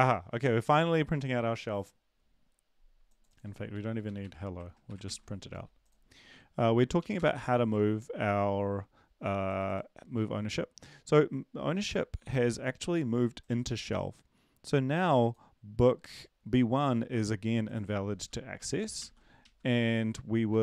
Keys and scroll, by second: 4.1 Delete, 4.2 Delete, 4.9 Delete, 5.0 ctrl+s, 6.6 ctrl+l, 7.0 Up, 7.1 Return, 12.3 ctrl+`, 19.0 ctrl+/, 19.0 ctrl+s, 19.4 Right, 19.8 End, 20.5 ctrl+`.